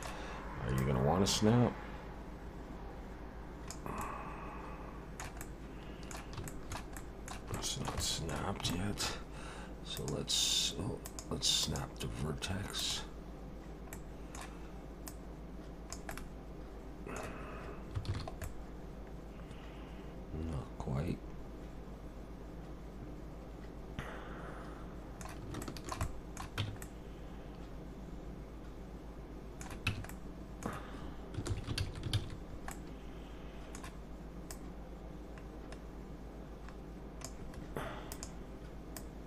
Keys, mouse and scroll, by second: 0.8 click, 4.0 middle click, 5.4 middle click, 6.5 middle click, 6.9 middle click, 7.6 shift+middle click, 7.7 shift+middle click, 8.0 middle click, 8.7 shift+middle click, 10.0 click, 11.6 click, 13.9 middle click, 15.1 click, 16.1 middle click, 18.1 alt+a, 18.4 middle click, 25.6 shift+middle click, 26.6 Tab, 26.8 middle click, 29.9 Tab, 30.1 middle click, 31.5 ctrl+z, 31.8 ctrl+z, 32.1 ctrl+z, 32.7 middle click, 34.5 click, 38.1 click, 39.0 click.